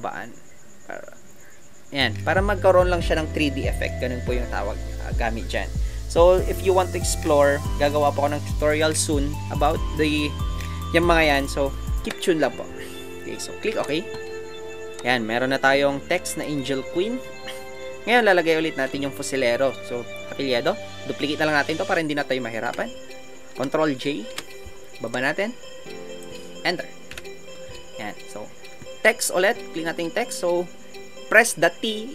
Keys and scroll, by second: 27.1 Return.